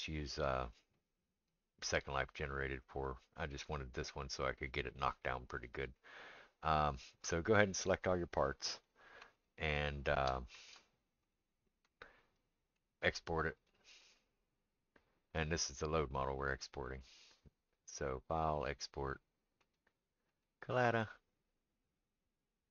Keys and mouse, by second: 0.9 click, 3.0 click, 4.5 click, 4.8-7.2 middle drag, 7.2 click, 7.3-9.8 middle drag, 9.8-22.7 shift+drag.